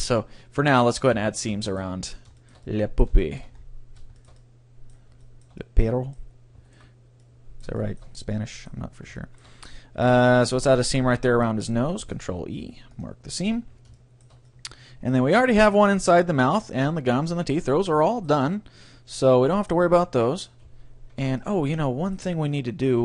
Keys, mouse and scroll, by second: 0.7-2.5 right drag, 0.8-2.9 middle drag, 1.2 Tab, 5.0-9.4 middle drag, 6.9-8.5 right drag, 12.0 ctrl+e, 13.5 a, 13.7 middle click, 17.7-18.1 scroll down 1, 18.1-20.3 middle drag, 21.4 middle click.